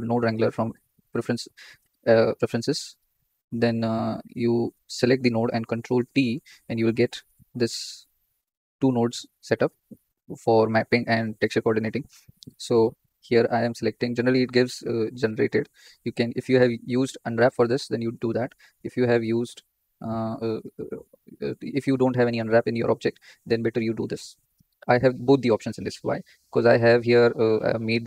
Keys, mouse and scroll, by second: 4.1 click, 6.1 ctrl+t, 7.9-28.0 drag.